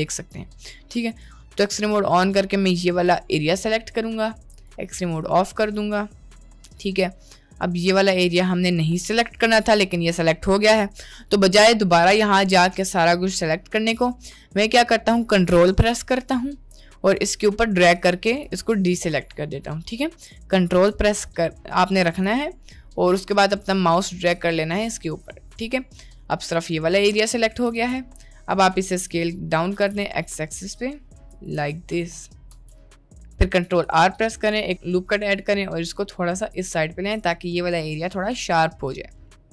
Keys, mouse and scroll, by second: 1.5-3.2 drag, 5.0-6.5 middle drag, 9.4-10.8 middle drag, 11.5 middle click, 12.1-14.8 middle drag, 16.9-18.4 ctrl+drag, 19.1 middle click, 22.5-24.9 ctrl+drag, 25.5 middle click, 26.9 middle click, 27.7 s, 29.3 middle click, 29.8 s, 31.5 Tab, 31.9 middle click, 32.5 Tab, 32.9 middle click, 33.6 ctrl+r, 36.9 Tab, 38.5 middle drag, 39.3-39.5 middle drag.